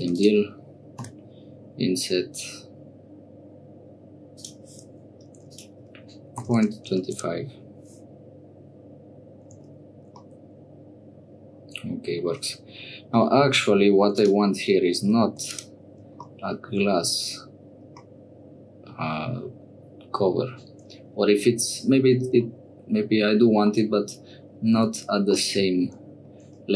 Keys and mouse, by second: 0.1 click, 1.2 i, 5.4-7.6 drag, 9.5 Tab, 10.2-12.2 middle drag, 13.2 middle click, 13.4 click, 14.6 Tab, 15.2 3, 15.4 click, 16.2 shift+click, 18.0 click, 18.2 middle click, 22.4 middle click, 23.7 shift+middle click, 24.7 Tab, 25.4 click, 25.7 click.